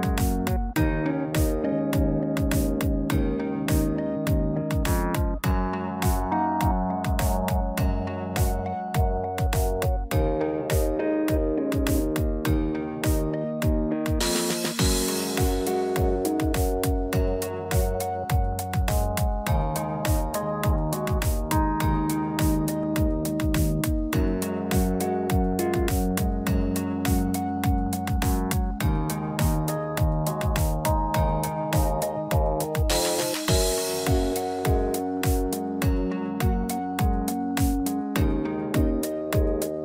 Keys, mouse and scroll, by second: 0.1 scroll down 1, 0.7 shift+middle click, 1.3 click, 2.3 scroll down 3, 2.7 shift+middle click, 3.7 middle click, 4.2 shift+middle click, 11.1 shift+middle click, 11.4 middle click, 11.8-12.2 scroll up 6, 12.3 Tab, 13.9 ctrl+r, 15.8 ctrl+b, 19.4 alt+e, 22.7 alt+e, 29.2 click, 31.7-32.2 scroll down 2, 32.0 middle click, 32.6 Tab, 32.8 scroll down 2, 33.0 middle click, 34.3 shift+middle click, 35.0 scroll up 1, 36.9 n, 38.3 click.